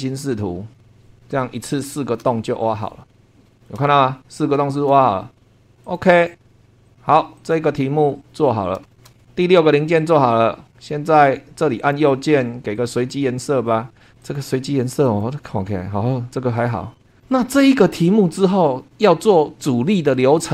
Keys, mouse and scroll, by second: 1.3 scroll up 2, 1.9 shift+middle click, 2.0-2.3 shift+scroll down 2, 2.4-3.5 shift+middle drag, 3.5 shift+middle click, 5.8 click, 6.9 click, 7.3 click, 8.4 scroll down 2, 8.9 shift+middle click, 10.7-11.8 scroll up 2, 11.8 right click, 12.8 click, 14.2 right click, 15.1 click.